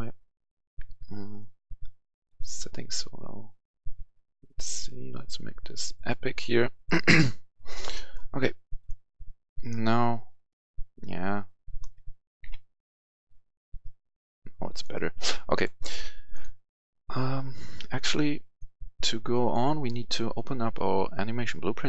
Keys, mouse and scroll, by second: 7.8 right click, 8.6 click, 11.7 right click, 11.8 w, 12.3 w, 13.7-15.2 right drag, 15.4 click.